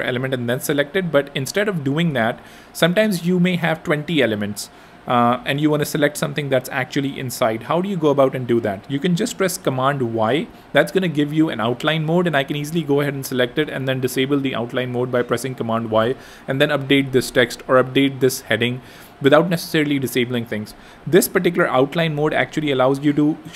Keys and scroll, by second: 1.0 super+z, 9.7 super+y, 12.7 super+y, 16.2 Return, 16.9 Escape, 17.9 super+y, 18.8 super+y, 21.7 super+y.